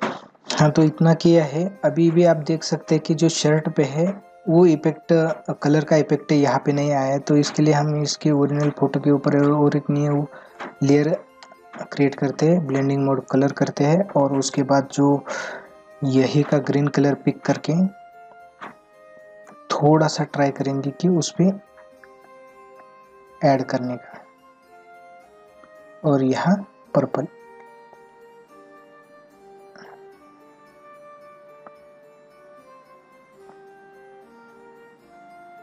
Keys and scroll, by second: 1.8 ctrl+-, 15.3 ], 28.2 ].